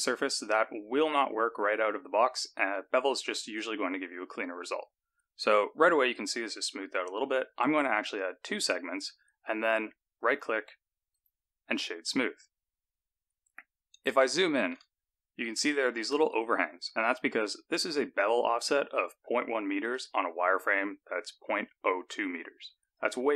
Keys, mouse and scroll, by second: 8.0 click, 10.1 click, 11.1 right click, 14.3 shift+middle click, 15.0 scroll up 4, 15.6 shift+middle click, 19.8 click, 22.9 click.